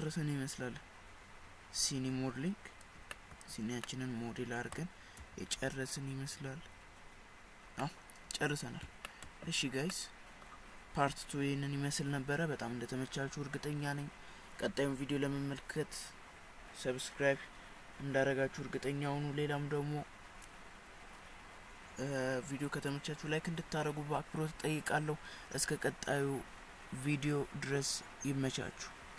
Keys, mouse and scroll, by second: 3.2 shift+middle click, 3.9 middle click, 5.4 KP_1, 7.8 middle click, 9.1 shift+middle click, 10.0 middle click.